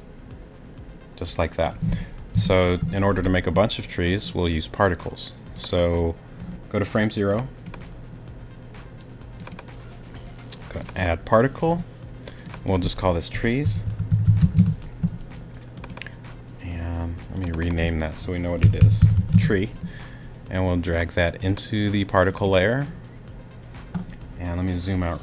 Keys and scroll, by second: 2.3 space, 13.4-14.4 typing, 14.6 Return, 18.4-19.3 typing.